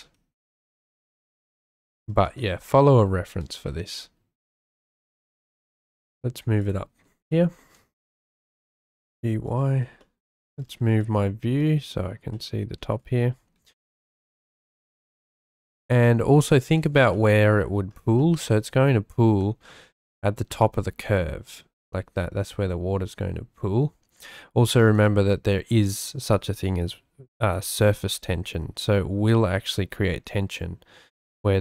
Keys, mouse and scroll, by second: 0.0 s, 1.3 click, 2.4 shift+middle click, 2.8 shift+middle click, 3.5 shift+d, 5.5 u, 6.1 y, 6.6 click, 7.3 shift+middle click, 8.6 g, 8.8 y, 9.5 click, 10.0 shift+middle click, 10.1 shift+click, 11.0 shift+click, 11.1 shift+middle click, 11.6 shift+click, 12.3 shift+click, 12.4 shift+middle click, 15.7 g, 15.9 y, 16.8 click, 17.1 shift+middle click, 18.2 shift+click.